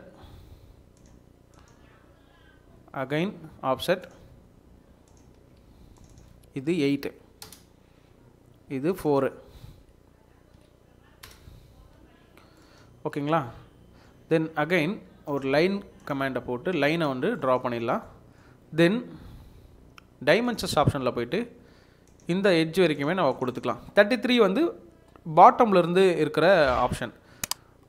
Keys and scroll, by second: 5.3 Escape, 7.4 8, 7.4 Return, 10.5 4, 11.2 Return, 12.6 Escape, 17.1 Escape.